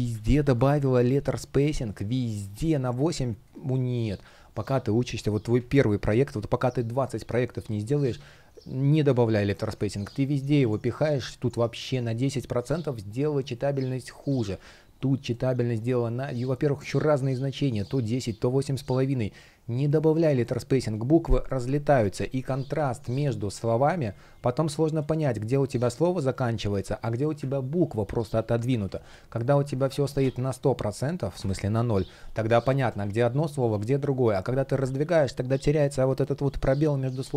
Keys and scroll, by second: 6.0 space, 23.3 shift+p, 27.5 super+z, 31.1 Return, 33.5 super+z.